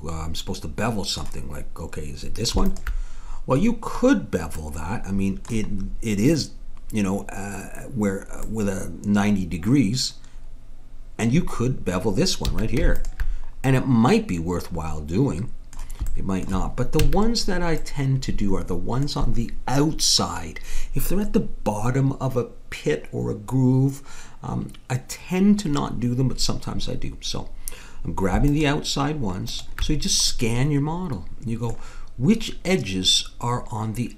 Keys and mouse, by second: 2.6-4.4 drag, 4.5 middle click, 5.8-6.9 middle drag, 12.5 a, 12.9-14.4 right drag, 13.6 click, 14.8 click, 16.1 click, 17.0 a, 28.4-31.3 drag, 31.5-33.6 middle drag.